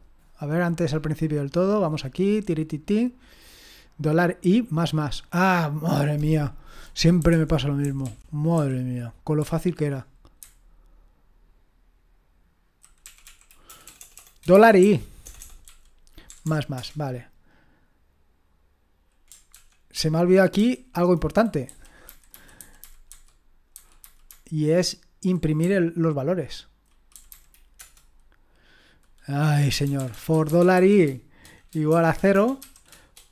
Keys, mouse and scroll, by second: 0.9-2.3 scroll up 1, 2.3-3.2 scroll down 1, 3.2 click, 4.0-4.8 scroll up 1, 4.8-5.4 scroll up 1, 5.4 click, 7.3 Home, 7.8 Down, 8.0 Up, 8.5 Down, 9.4 Up, 10.4 Left, 10.6-11.1 typing, 11.2-12.8 Left, 13.0 Right, 13.2 Right, 13.7-16.4 typing, 16.7 Return, 19.5 ctrl+p, 20.6 Up, 21.6 Down, 22.1 Left, 22.3 Left, 22.6 Left, 22.8 Left, 23.1 Left, 23.7 Left, 24.0 Left, 24.3-25.3 Left, 25.5 Left, 25.6-26.8 Left, 27.1 Left, 27.3 Left, 27.7 Return, 29.8-30.7 typing, 31.9-33.3 typing.